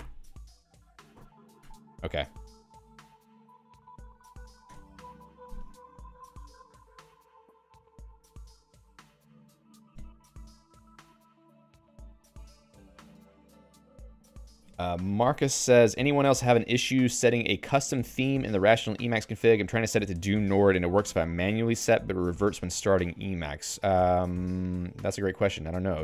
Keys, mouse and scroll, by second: 0.0 q, 1.7 Escape, 3.3 ctrl+g, 3.8-4.8 typing, 6.1 Down, 7.7 Up.